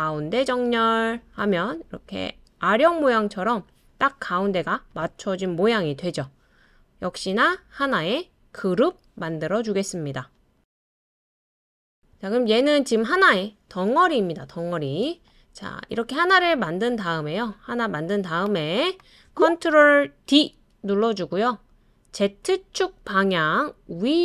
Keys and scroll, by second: 20.3 super+d.